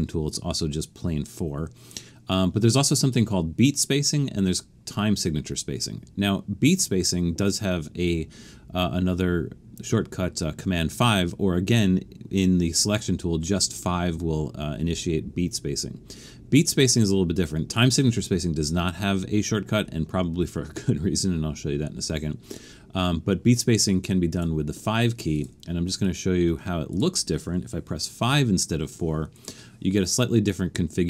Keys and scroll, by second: 28.3 5.